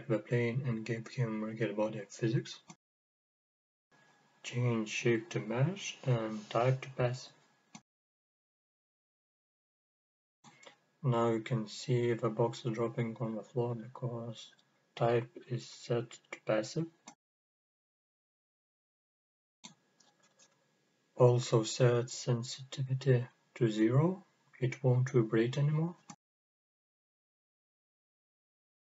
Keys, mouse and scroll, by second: 1.1 click, 4.2 click, 5.7-6.5 scroll down 1, 6.6-11.3 drag, 11.9-16.0 drag, 16.5 scroll up 1, 21.7 click, 22.6-23.2 scroll down 1, 24.8-25.2 drag, 25.4-26.0 scroll down 1, 26.0-27.7 drag, 28.2 scroll up 1, 28.8 scroll down 1.